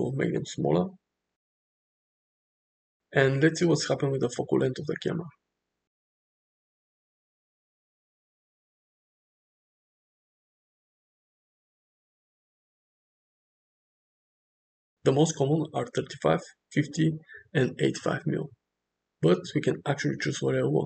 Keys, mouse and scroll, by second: 0.0 click, 1.2 shift+middle drag, 2.0 space, 4.2 space, 4.6 click, 6.7 click, 6.9 8, 9.1 g, 12.6-13.8 drag, 14.6-16.8 drag, 17.1-18.3 drag, 19.8-20.8 drag.